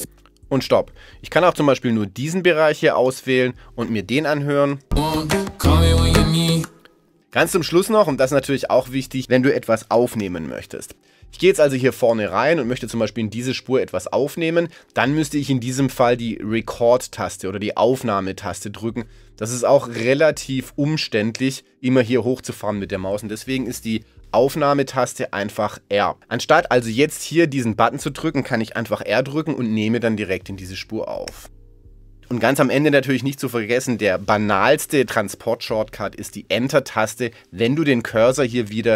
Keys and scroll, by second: 4.7 space, 10.2 z, 31.3 r.